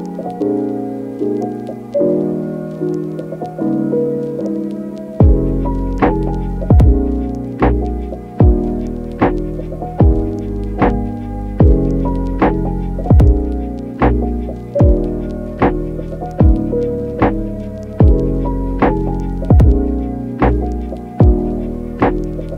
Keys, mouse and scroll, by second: 0.0 click, 0.4 click, 0.6 click, 1.6 click, 2.0 click, 4.1 a, 4.2 Tab, 4.4 Tab, 5.3 click, 6.1 click, 6.2 click, 6.5 click, 7.0 click, 10.1 click, 10.8 click, 11.0 click, 12.0 click, 12.9 click, 13.8 click, 15.2 click, 15.5 click, 15.6 click, 16.5 click, 16.8 click, 17.7 click, 18.0 click, 18.6 click, 19.1 Tab, 19.2 click, 19.3 middle click, 21.6 click, 22.2 Tab, 22.4 click.